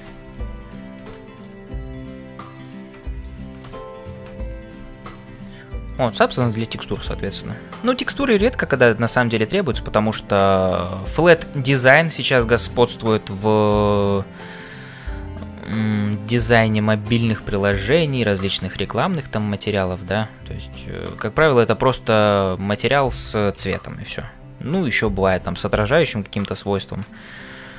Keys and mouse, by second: 0.0-27.7 typing, 1.1 shift+middle click, 2.5 click, 3.1 shift+middle click, 11.3 shift+middle click, 15.6 click, 18.1 click, 26.4 click.